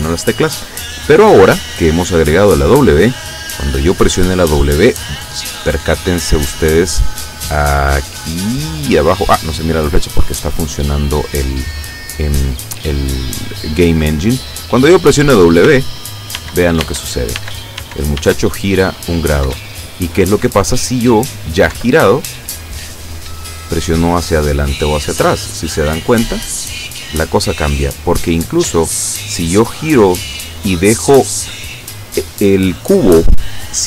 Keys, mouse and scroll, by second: 15.8 w, 19.5 Up, 21.8 Down, 26.2 w.